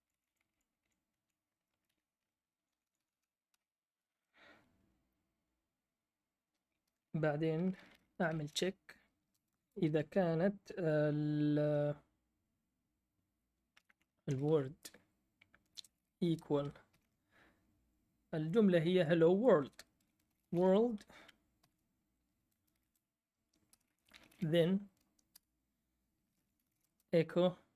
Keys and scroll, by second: 0.0 Left, 0.1 Left, 0.3 Left, 0.5 Left, 1.1 Right, 1.6-3.0 typing, 3.0 Right, 3.5 Return, 8.0-9.5 typing, 13.9-16.9 typing, 19.9-24.8 typing, 25.3 Return, 26.1-27.3 typing.